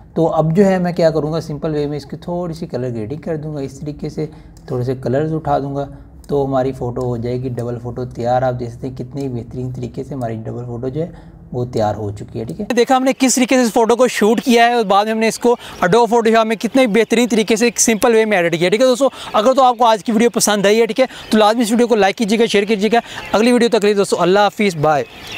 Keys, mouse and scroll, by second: 3.4 click.